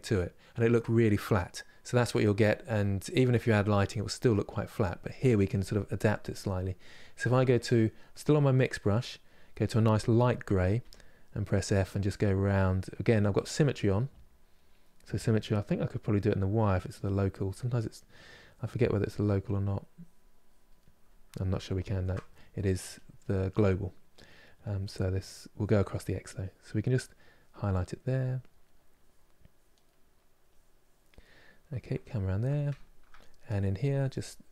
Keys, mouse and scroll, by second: 6.9-8.9 drag, 8.9-10.5 middle drag, 10.5 f, 12.0-14.3 drag, 14.3-16.7 middle drag, 16.7 click, 17.2-18.2 middle drag, 18.2 click, 19.0 middle click, 19.7 click, 20.5 middle click, 21.4 ctrl+z, 21.6 ctrl+z, 22.7 click, 23.2-25.2 middle drag, 25.2-26.5 drag, 26.5 middle click, 27.0 click, 27.5-28.7 middle drag, 28.7 click, 29.6 middle click, 30.2 click, 31.0-33.2 middle drag, 33.2-34.5 drag.